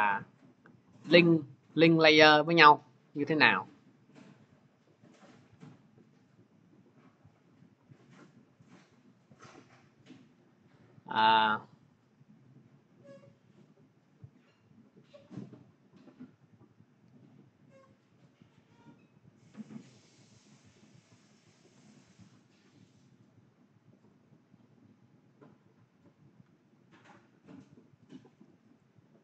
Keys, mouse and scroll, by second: 0.0 ctrl+click, 0.5 scroll, 1.2-1.6 scroll, 6.2 scroll, 7.0-7.6 scroll, 8.5-8.9 scroll, 9.2-10.3 scroll, 11.5-12.2 scroll, 13.0-13.5 scroll, 15.0-15.6 scroll, 17.9 ctrl+click, 19.2 click, 22.6 click, 28.7 click.